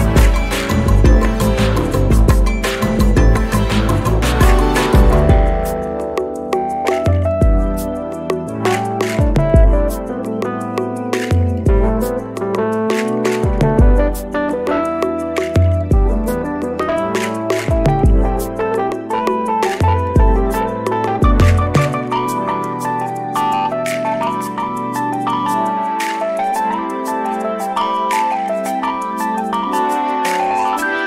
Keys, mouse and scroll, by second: 1.7 click, 3.8 click, 5.0 click, 5.7-6.9 drag, 6.9 ctrl+z, 8.3 ctrl+d, 9.7 ctrl+d, 11.0 shift+click, 13.4 ctrl+KP_Subtract, 14.7 ctrl+z, 15.8 ctrl+click, 16.5 shift+click, 20.0 click, 20.8 shift+click, 22.1 ctrl+KP_Multiply, 24.0 click, 25.6 ctrl+d, 26.7 click, 29.1 ctrl+d.